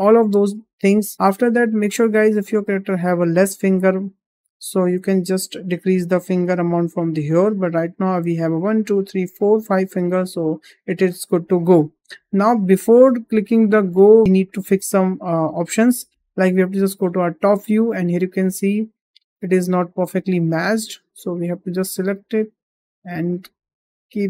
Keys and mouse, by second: 1.1-1.5 middle drag, 1.7-2.2 middle drag, 4.5-5.1 middle drag, 7.5-8.1 middle drag, 9.1 middle drag, 18.4 shift+middle click, 18.8 click, 19.0 click, 20.0 g, 21.1 drag, 21.9 g.